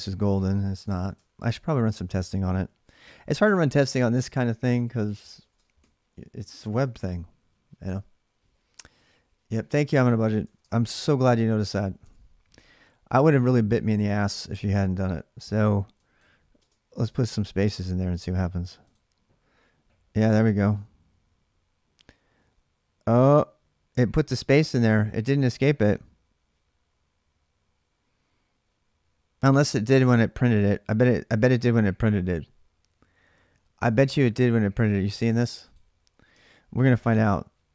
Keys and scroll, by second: 0.0-1.3 typing, 0.5 ctrl+[, 3.2-6.2 typing, 4.9 ctrl+[, 10.3 ctrl+[, 10.5 typing, 10.7 Return, 11.8 alt+Tab, 16.4 space, 16.8 space, 36.6 shift+1.